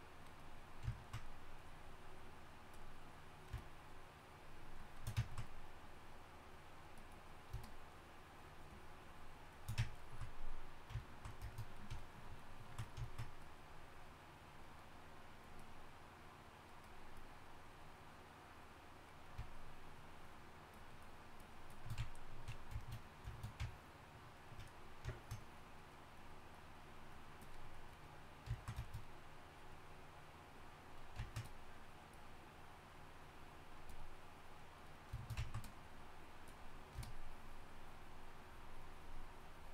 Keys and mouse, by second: 13.4-28.9 drag, 31.0-39.7 drag.